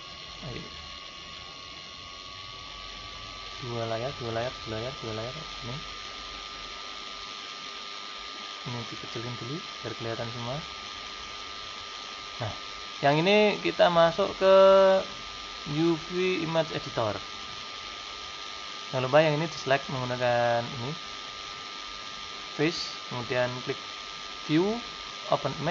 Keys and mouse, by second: 3.3-5.1 drag, 7.1-10.7 drag, 11.0-13.0 drag, 14.0-15.9 drag, 19.9-21.9 drag, 21.9 middle click, 24.3-25.7 drag.